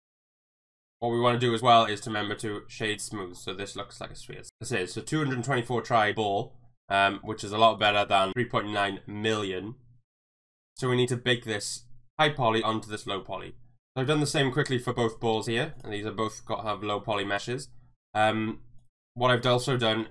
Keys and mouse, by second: 0.1 click, 0.4 middle click, 0.8 click, 2.9-3.3 middle drag, 3.8-4.5 middle drag, 5.7 middle drag, 7.8 click, 8.3 middle click, 8.7-10.5 middle drag, 13.8 KP_1.